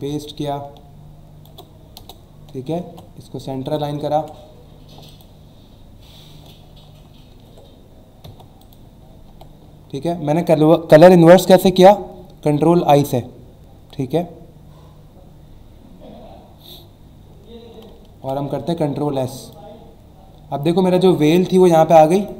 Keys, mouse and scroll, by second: 2.0 Return, 2.8 ctrl+a, 3.6 click, 4.0 ctrl+d, 5.1 click, 8.2 e, 8.6 click, 9.3 v, 17.4 alt+scroll up 1, 18.1 s, 19.4 click, 20.9 alt+scroll up 1, 21.6 alt+scroll up 1, 22.2 click.